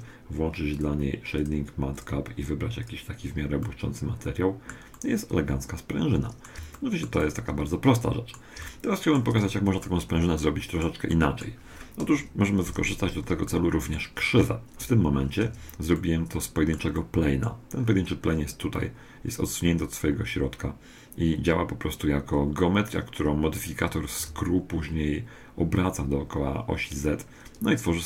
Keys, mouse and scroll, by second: 0.7-3.8 drag, 3.7-11.5 middle drag, 12.1 KP_1, 13.1 middle click, 15.5 Tab, 16.0-19.0 middle drag, 19.0-20.0 scroll up 1, 20.0 middle click, 20.1 scroll up 1, 24.2 Tab, 27.8-28.0 scroll up 1.